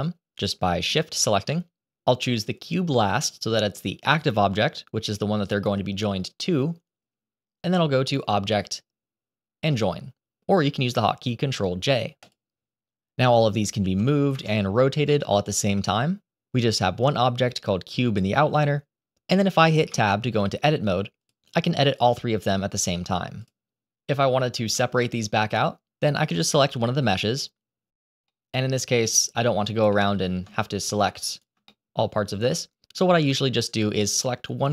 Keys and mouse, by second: 0.3 shift+click, 8.2-12.3 drag, 13.7 g, 15.0 r, 19.8 Tab, 21.1 click, 21.8 click, 22.7 click, 26.7 click, 28.2 middle click, 29.8 middle click, 30.8 shift+right click, 31.0 shift+middle click, 31.3 shift+right click, 31.6-32.8 middle drag, 33.1 click, 33.6 middle click, 34.6 click.